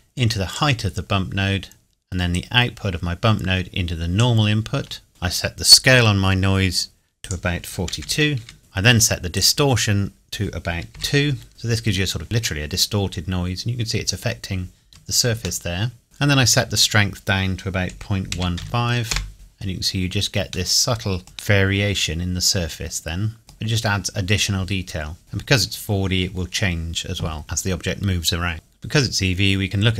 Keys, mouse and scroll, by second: 1.2-2.3 scroll down 2, 2.3 click, 5.1-6.6 scroll up 2, 7.1 click, 7.9 KP_4, 8.4 KP_2, 9.3 click, 10.9 KP_2, 11.5 KP_Enter, 12.2-13.3 scroll up 1, 15.6 shift+middle click, 16.7 click, 17.9 KP_Decimal, 18.3 KP_1, 19.0 KP_Enter, 19.7 scroll down 1, 20.7 middle click, 23.2 middle click, 23.6 scroll down 1, 28.5 click, 29.6 middle click.